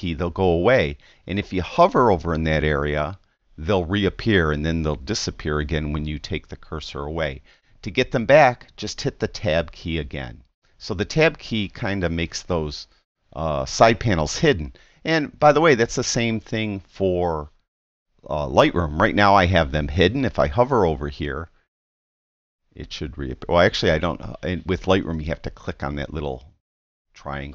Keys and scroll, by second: 9.4 Tab.